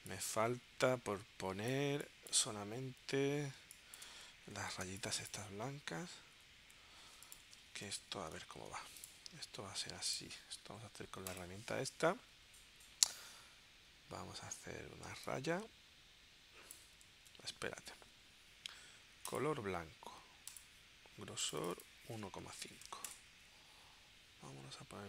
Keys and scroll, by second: 3.6 space, 4.9 space, 8.6 shift+super+g, 17.2 super+z, 22.4 1, 23.0 Return.